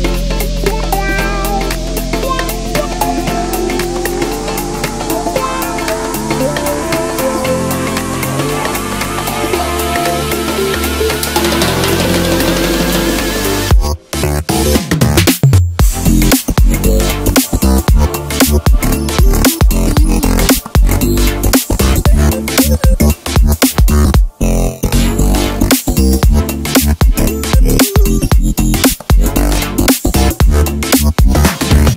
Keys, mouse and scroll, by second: 1.1 g, 4.2 e, 5.0 s, 6.5 g, 8.7 middle click, 9.6 scroll up 2, 11.2 e, 12.6 s, 14.5-16.1 middle drag, 16.1 e, 18.7 g, 21.9-24.2 middle drag, 24.2 f, 26.5 click, 27.0 click.